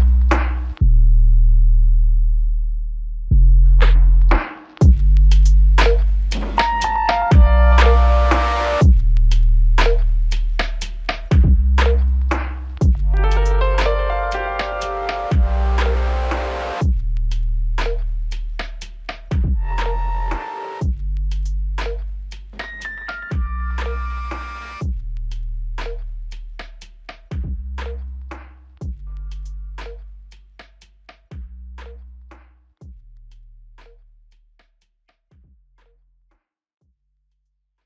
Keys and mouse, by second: 0.9 shift+click, 3.6 double click, 11.4 shift+click, 15.4 ctrl+click, 15.7 shift+click, 17.3 ctrl+alt+click, 19.9 alt+shift+click, 25.3 alt+click, 29.5 alt+click.